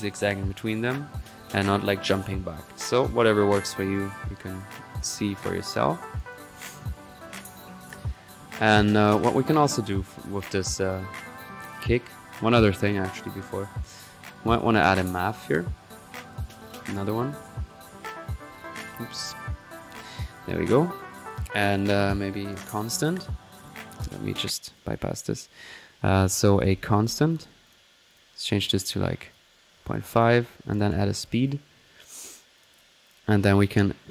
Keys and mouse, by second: 1.9 click, 3.5 click, 3.9 click, 4.5 click, 5.4 click, 5.9-6.5 right drag, 6.5 click, 6.9 middle click, 7.6 click, 8.1 click, 9.0-9.7 middle drag, 11.2 right click, 11.8-12.3 drag, 12.5-13.8 drag, 14.7-15.0 right drag, 15.0 click, 17.1-17.8 typing, 20.3-20.8 drag, 20.8-22.3 drag, 23.1 click, 24.3 click, 24.7 click, 26.3 click, 26.3-27.0 typing, 27.7-28.3 drag, 29.1-29.4 drag, 30.6-32.0 typing, 30.7 right click, 33.1 drag, 33.6-34.1 drag.